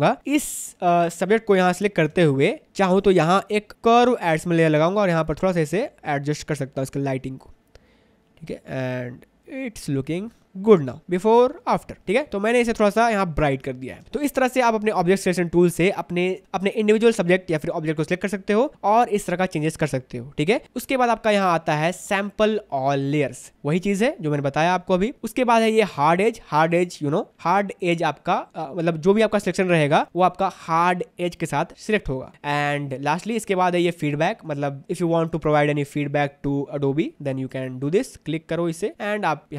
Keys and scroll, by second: 2.2 space, 12.9 v, 13.2 space.